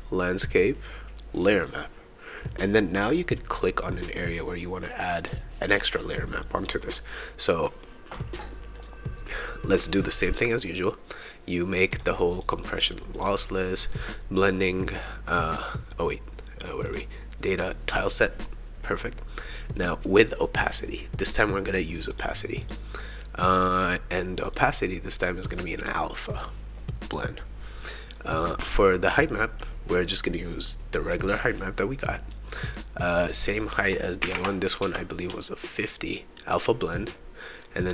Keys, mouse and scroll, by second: 1.3 click, 5.2 click, 8.7 click, 11.9 click, 12.3 click, 13.1 click, 13.9 click, 15.6 click, 16.8 click, 22.1 click, 22.6 click, 24.4 click, 25.4 click, 31.4-32.6 drag, 33.0-35.4 drag.